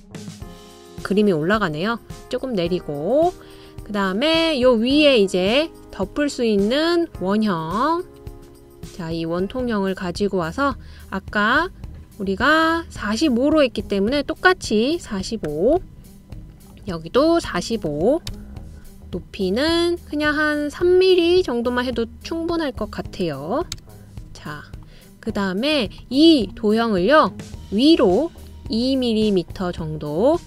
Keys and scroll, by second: 0.4 typing, 2.4 Down, 5.3 typing, 15.8 4, 16.2 5, 18.3 4, 18.7 5, 19.1 Return, 21.0 typing, 24.1 3, 24.5 Return, 25.7 typing, 27.6-28.3 typing.